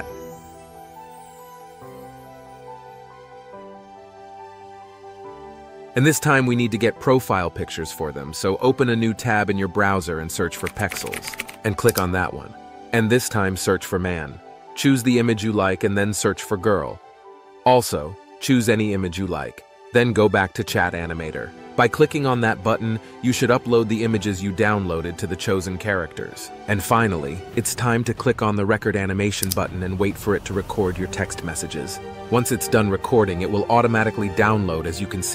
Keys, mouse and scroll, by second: 0.6 ctrl+c, 0.7 ctrl+v, 2.1 ctrl+c, 2.3 ctrl+v, 2.6 ctrl+c, 2.8 ctrl+v, 3.2 ctrl+c, 3.4 ctrl+v, 3.8 ctrl+c, 4.4 ctrl+c, 4.6 ctrl+v, 5.0 ctrl+c, 5.3 ctrl+v, 10.3-12.2 typing, 13.7-14.4 typing, 14.6 Return, 16.3-17.3 typing, 29.6 click.